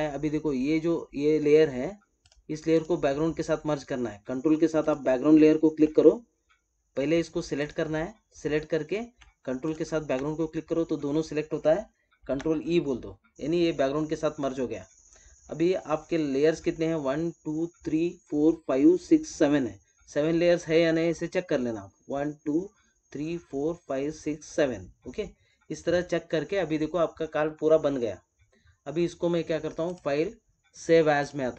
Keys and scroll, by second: 12.2 ctrl+e.